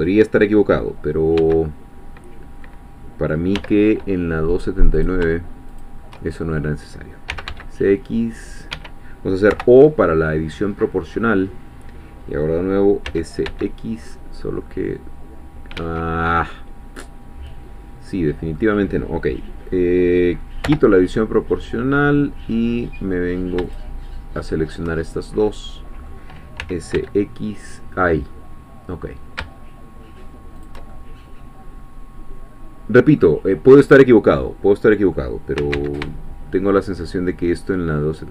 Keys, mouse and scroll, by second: 1.4 x, 2.6 middle click, 3.6 3, 5.0 shift+click, 6.2-7.3 shift+middle drag, 7.3 s, 7.5 x, 8.7 Escape, 9.5 o, 10.1-13.1 middle drag, 13.1 s, 13.5 x, 14.0-14.9 scroll up 1, 15.7 Escape, 16.3-18.7 middle drag, 20.7 o, 23.7 shift+click, 24.5 shift+click, 25.5-26.6 middle drag, 26.6 s, 26.9 x, 30.6 shift+click, 30.9-35.3 shift+middle drag, 35.6 s, 35.7 x, 38.2 shift+click.